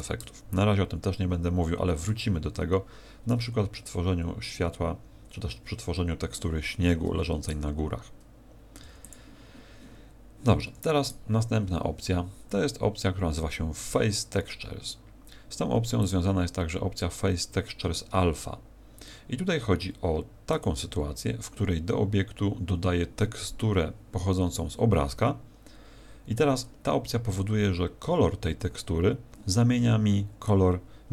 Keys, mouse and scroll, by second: 7.4 right click, 8.8 x, 11.0 right click, 16.0 click, 20.5 click.